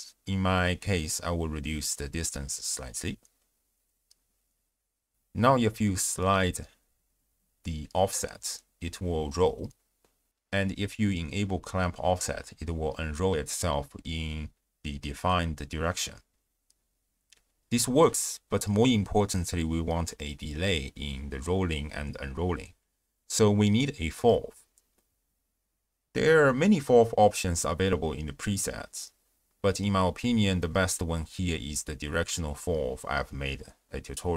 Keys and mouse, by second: 0.8 click, 2.4-3.7 drag, 4.7-5.1 shift+drag, 6.8-9.1 drag, 9.6 click, 10.4-17.0 drag, 17.8-19.0 drag, 21.2 ctrl+alt+shift+w, 21.3 ctrl+alt+shift+q, 23.2 shift+a.